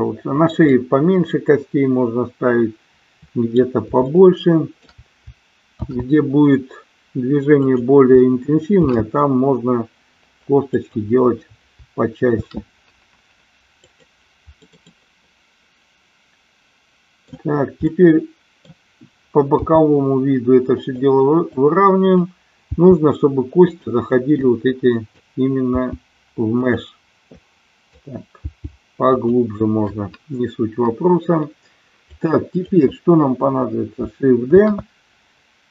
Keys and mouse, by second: 0.7-3.6 middle drag, 4.1 shift+middle click, 5.8 shift+d, 7.6 click, 8.8 shift+d, 10.7 click, 12.4 shift+d, 13.8 click, 14.7-17.2 middle drag, 17.9 middle click, 19.4 g, 20.7 click, 21.6 click, 22.7 g, 24.2-25.2 drag, 25.7 g, 27.6 click, 28.3 g, 29.1 click, 32.1 click, 34.6 shift+d.